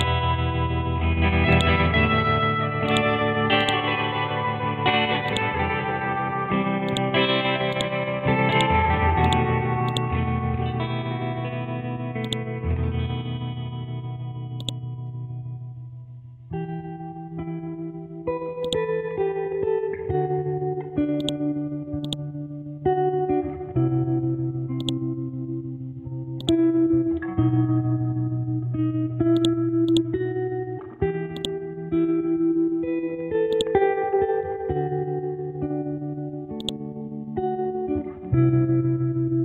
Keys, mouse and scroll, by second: 0.6 scroll up 1, 1.5-10.8 drag, 10.8-11.2 scroll down 1, 11.2 scroll up 1, 12.2-13.9 drag, 13.9-14.6 scroll up 1, 14.6 click, 15.8 scroll down 1, 18.6-20.3 drag, 20.3-21.2 scroll up 1, 21.2-29.4 drag, 31.9 scroll down 1, 32.5 scroll up 1, 33.5-39.4 drag.